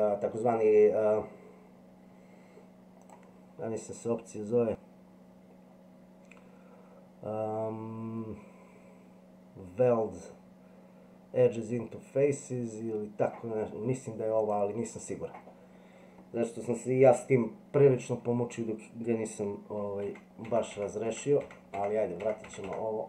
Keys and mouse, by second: 3.0-14.6 drag, 20.1 ctrl+z, 20.5 ctrl+z, 20.8 ctrl+z, 21.4 ctrl+z, 21.8 ctrl+z, 22.5 ctrl+z.